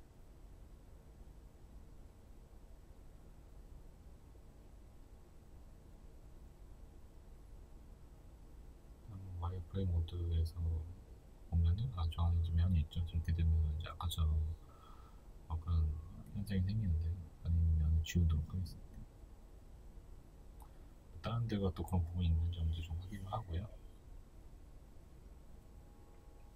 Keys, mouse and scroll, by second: 6.4 click, 7.0 Tab, 7.3-11.9 middle drag, 10.1 z, 11.9 right click, 12.4-13.2 middle drag, 13.2 right click, 13.6 right click, 14.1 right click, 14.4-15.9 middle drag, 15.5 Tab, 15.9 right click, 16.3 right click, 17.1 3, 17.3 right click, 18.9 x, 19.3 right click, 20.0 middle click, 20.6 right click, 21.2-24.5 middle drag, 21.8 Tab, 23.2 Tab, 24.5 right click, 25.9-26.5 middle drag.